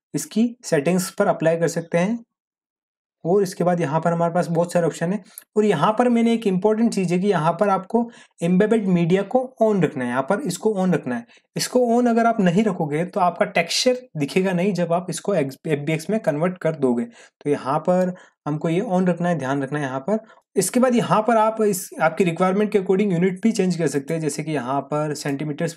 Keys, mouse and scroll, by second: 3.2-5.0 scroll down 1, 5.1-6.2 scroll down 1, 19.2-20.4 scroll down 1, 20.4 click, 23.9 click.